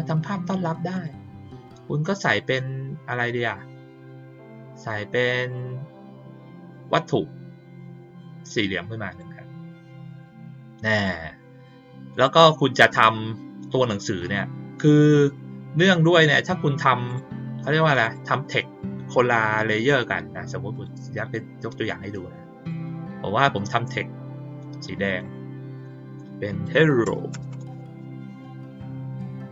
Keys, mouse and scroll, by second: 0.9 click, 5.2 click, 6.6 click, 8.2 click, 10.0 click, 12.1 click, 17.0 click, 18.0 click, 20.7 click, 22.0 click, 23.4 click, 25.0 click, 25.7 click.